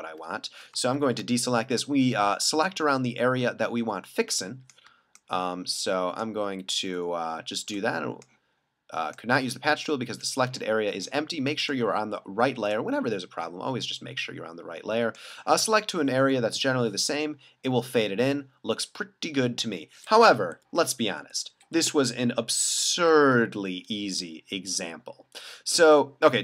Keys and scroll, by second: 1.0 super+d, 16.5 super+d, 20.6 super+z, 21.2 super+z, 21.8 super+z, 22.3 alt+super+z, 23.3 super+d.